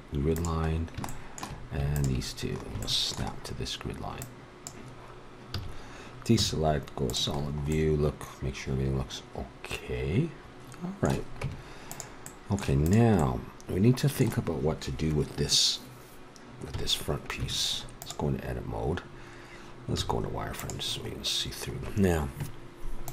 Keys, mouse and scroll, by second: 0.7 middle click, 2.9-4.5 middle drag, 4.5-5.9 drag, 5.5 a, 6.4 z, 7.3-9.5 middle drag, 11.4 Tab, 12.8-14.0 right drag, 16.7 KP_1, 17.4 Tab, 20.0 z, 21.9 middle click.